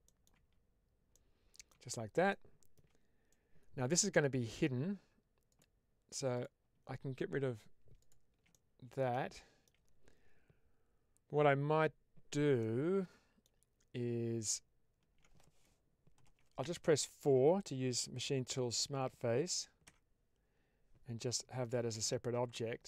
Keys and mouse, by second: 0.3 Tab, 1.0 middle click, 1.6 Tab, 2.3 middle click, 3.2 middle click, 5.4 click, 8.4 middle click, 9.2 shift+middle click, 12.5 middle click, 16.1 ctrl+KP_Add, 19.9 4, 21.8 Tab.